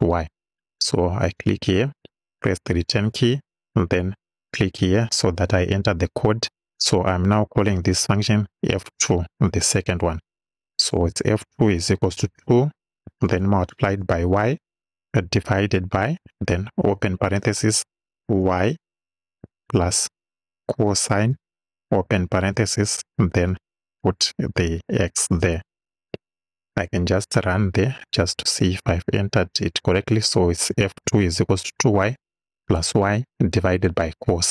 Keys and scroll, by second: 1.9 Return, 7.9 f, 9.5 2, 10.4 =, 12.1 2, 13.1-15.2 typing, 16.2 shift+/, 16.8 shift+9, 18.5-20.9 typing, 22.0 shift+s, 22.7 shift+9, 24.0 x, 25.8 Right.